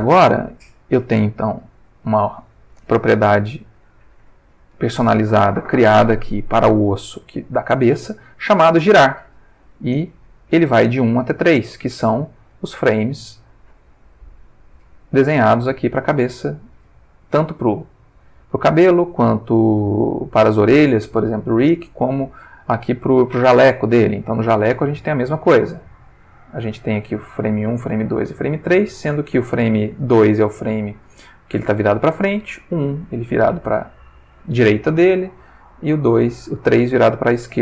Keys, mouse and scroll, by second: 1.0 click, 7.1 r, 7.9 Escape, 9.0-12.6 drag, 12.0 Escape, 13.1 click, 14.4-17.4 drag, 16.7 Escape, 20.4 click, 21.7 click, 24.3 Tab, 25.2-31.3 drag, 32.3-37.6 drag.